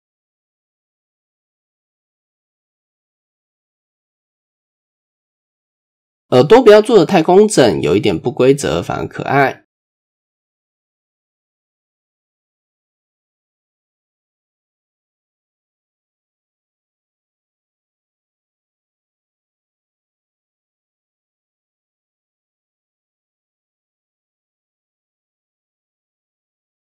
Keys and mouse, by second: 0.0 s, 1.5-2.3 drag, 2.8 click, 4.2 e, 5.1 e, 6.2-6.5 shift+middle drag, 6.6 drag, 7.1-7.9 drag, 8.5-9.5 drag, 9.7 click, 9.9 click, 11.3 ctrl+r, 12.8 click, 13.5 click, 13.8 click, 15.3 click, 16.3 click, 17.2 click, 17.4 click, 18.0-18.6 drag, 19.0 click, 19.7 click, 20.5 click, 20.8 click, 21.4 click, 22.7 click, 23.6-24.8 drag, 26.2 KP_1, 26.5 KP_3.